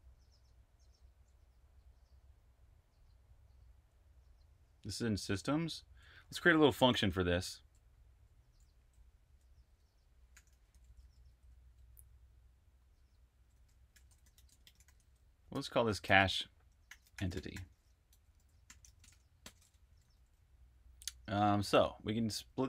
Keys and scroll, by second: 6.8 shift+y, 10.2-14.2 typing, 16.0-22.6 typing.